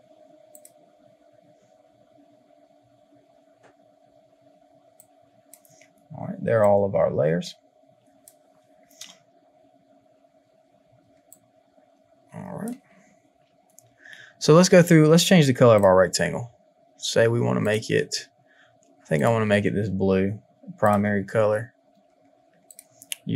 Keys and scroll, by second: 11.0 space.